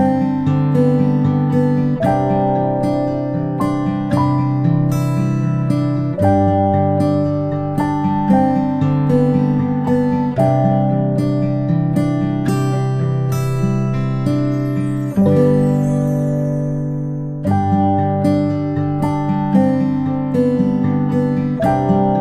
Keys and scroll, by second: 0.2 space.